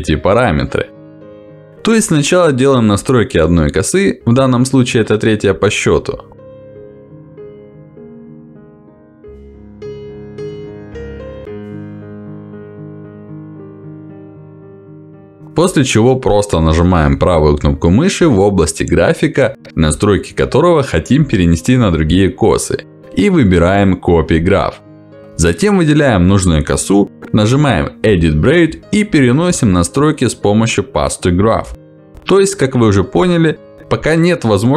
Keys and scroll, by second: 14.6 Escape.